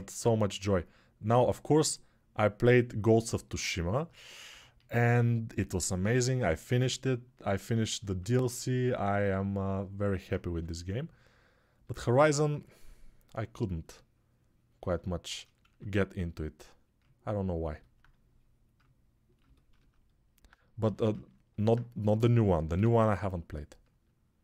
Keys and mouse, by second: 1.0 2, 4.2 1, 8.9 ctrl+right click, 10.3 2, 15.4 1, 21.1-24.4 drag, 22.5 2.